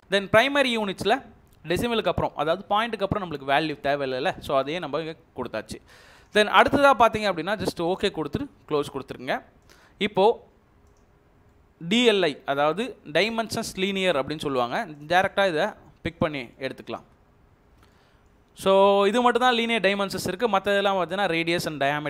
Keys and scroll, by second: 17.0 space, 18.5 Escape.